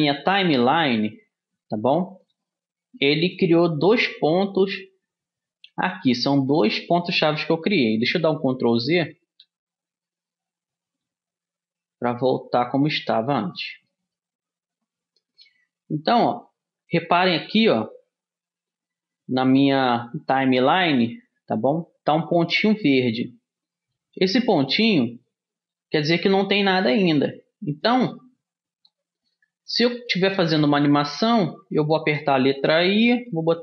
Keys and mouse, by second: 9.0 ctrl+z, 9.4 ctrl+z, 9.8 ctrl+z, 10.9 ctrl+z, 11.4 ctrl+z, 12.7 ctrl+z, 14.1-22.1 middle drag, 33.0 i.